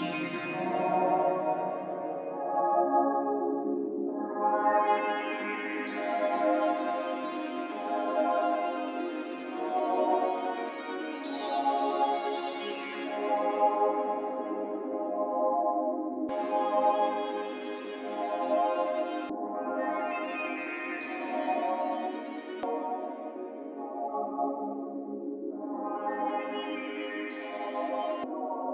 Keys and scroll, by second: 16.2 d.